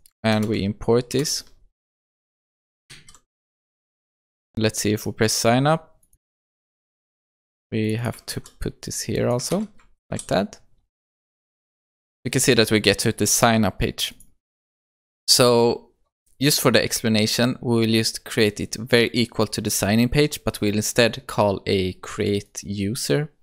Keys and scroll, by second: 0.4 alt+Return, 3.1 ctrl+s, 8.4 ctrl+c, 9.5 ctrl+v, 10.1 ctrl+s.